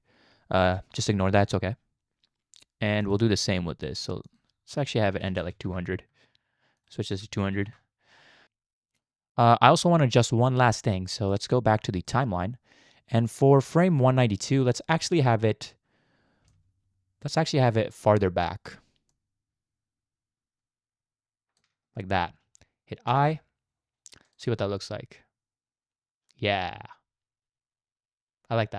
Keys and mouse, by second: 3.0 click, 4.4-5.6 drag, 5.4 0, 6.8 click, 7.4 0, 8.4 space, 9.0 click, 11.3 click, 13.3-14.6 drag, 16.6-18.7 shift+drag, 19.1-21.6 shift+drag, 23.1 i, 24.3 click, 24.4 space.